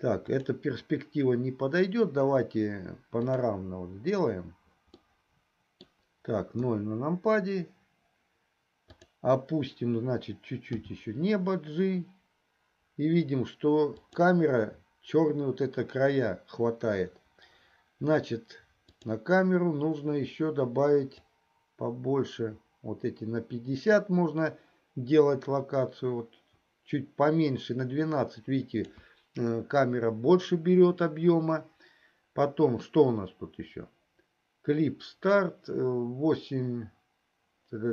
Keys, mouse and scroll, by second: 0.7-3.7 drag, 5.3-6.5 middle drag, 7.2 KP_0, 11.2 g, 18.8 click, 21.6-28.9 drag.